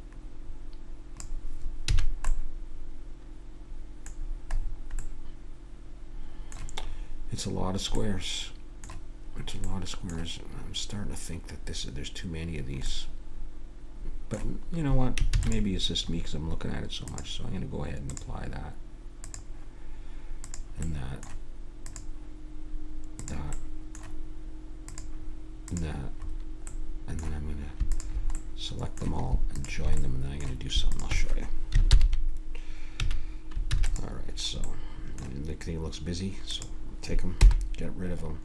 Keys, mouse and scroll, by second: 1.8 a, 2.0 middle click, 4.1 middle click, 5.2-9.7 middle drag, 13.1-15.3 middle drag, 15.3 ctrl+s, 16.0-17.1 middle drag, 17.1-18.7 drag, 20.8-23.0 middle drag, 23.4 click, 23.6-25.7 middle drag, 25.7-26.7 drag, 26.7-30.3 middle drag, 30.3 click, 30.4-31.9 middle drag, 31.9 ctrl+j, 31.9 click, 33.0 a, 33.7 ctrl+s, 34.7-36.5 middle drag, 36.5-38.2 drag, 37.4 h, 38.2-38.4 middle drag.